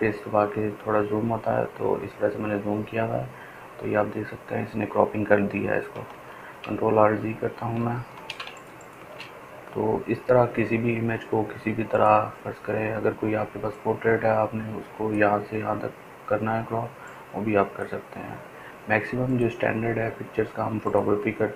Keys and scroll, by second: 0.0 ctrl+space, 0.2 ctrl+space, 9.6 ctrl+alt+z, 10.6 ctrl+alt+z.